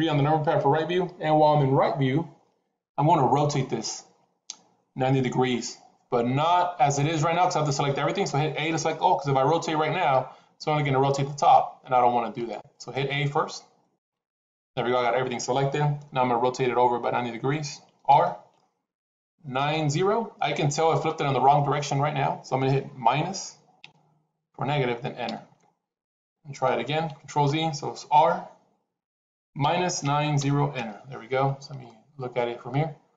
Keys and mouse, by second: 9.9 r, 13.9 a, 17.9 r, 27.4 ctrl+z, 28.0 r, 31.7-33.0 middle drag.